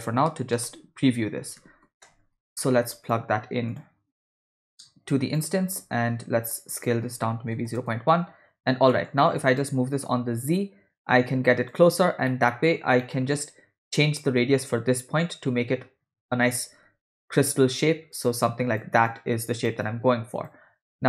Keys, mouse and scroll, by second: 4.4-5.5 drag, 6.8-7.8 drag, 8.9 middle click, 9.4 click, 10.1-11.8 shift+drag, 12.3-12.8 middle drag, 13.0 ctrl+middle click, 17.6 click, 18.2 click, 19.1 click, 19.8 click.